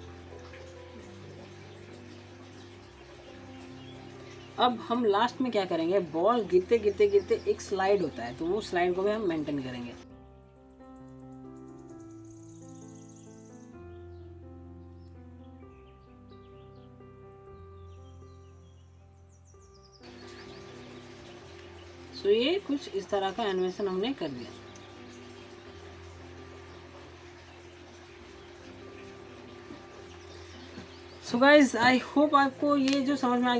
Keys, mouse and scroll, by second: 0.1-0.4 alt+middle drag, 0.4-0.9 alt+scroll up 1, 2.2 alt+scroll up 1, 7.4 click, 10.1 click, 10.2 alt+middle click, 10.3 click, 10.4 s, 10.4 click, 10.4 shift+middle click, 10.5 click, 10.5 shift+middle click, 10.6 scroll down 1, 10.7 click, 10.9 ctrl+z, 11.0 click, 11.1 scroll up 1, 11.2 alt+middle click, 11.2 ctrl+click, 11.3-11.7 scroll down 2, 11.3 click, 11.4 shift+middle click, 11.5 click, 11.7 click, 11.9 alt+middle click, 11.9 alt+scroll up 1, 12.1 click, 12.6 alt+middle click, 12.7 ctrl+z, 12.8 click, 12.8 7, 12.9 click, 13.1 ctrl+z, 13.1 ctrl+shift+right click, 13.2 click, 13.4 s, 13.5 right click, 13.7 click, 13.9 middle click, 14.0 click, 14.3 scroll down 2, 14.3 alt+middle click, 14.4 click, 14.6 click, 15.0 scroll up 1, 15.0 middle click, 15.1 ctrl+z, 15.2 shift+middle click, 15.2 click, 15.3 middle click, 15.3 click, 15.3 middle click, 15.4 scroll down 2, 15.5 click, 15.6 middle click, 15.7 click, 15.8 alt+middle click, 15.8 click, 15.9 middle click, 16.0 click, 16.0 alt+middle click, 16.0 click, 16.1 middle click, 16.2 click, 16.2 middle click, 16.2 ctrl+z, 16.3 click, 16.3 middle click, 16.4 scroll down 1, 16.5 click, 17.0 scroll down 1, 17.0 alt+middle click, 17.1 click, 17.3 click, 17.5 alt+middle click, 17.6 click, 17.6 shift+middle click, 17.7 click, 18.1 shift+middle click, 18.2 click, 18.2 shift+middle click, 18.3 click, 18.3 middle click, 18.4 click, 18.7 alt+scroll up 1, 18.8 click, 18.8 middle click, 18.9 click, 19.4 click, 19.6 shift+middle click, 19.6 click, 19.6 middle click, 19.7 scroll down 1, 19.7 click, 19.8 scroll up 1, 19.9 scroll down 1, 19.9 click, 23.8 scroll down 1, 24.3 alt+middle click, 24.7 alt+scroll down 1, 25.4 alt+click, 25.5 alt+click, 26.5 alt+scroll up 1, 26.7 alt+click, 26.7-27.3 alt+drag, 32.8 click.